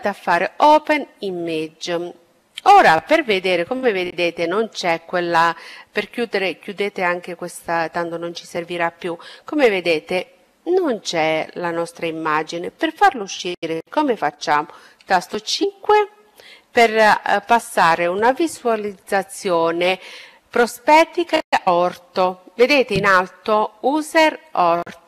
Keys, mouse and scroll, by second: 0.0-1.7 drag, 3.2-4.9 drag, 14.3 KP_5, 18.4 KP_5, 20.8 KP_5, 24.3 KP_5.